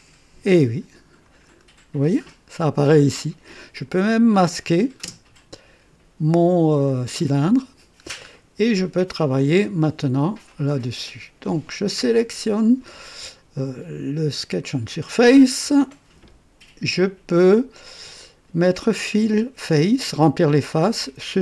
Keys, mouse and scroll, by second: 1.6 scroll up 2, 2.0-2.7 right drag, 3.7 click, 5.0 space, 7.8-8.2 scroll down 2, 9.5 click, 10.5 right click, 20.9 click.